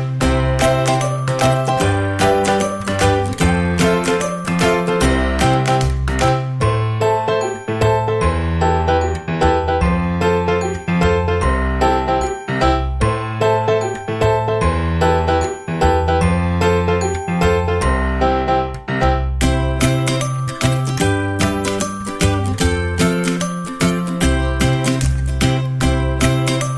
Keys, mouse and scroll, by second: 1.0 a, 2.4-3.9 drag, 4.2 click, 4.4-5.6 drag, 5.7-11.3 drag, 11.4 right click, 13.0-16.0 right drag, 16.0-17.7 drag, 17.7 right click, 18.1-19.9 drag, 19.9-21.0 right drag, 21.0-24.0 drag, 24.0 right click, 24.4-26.7 drag.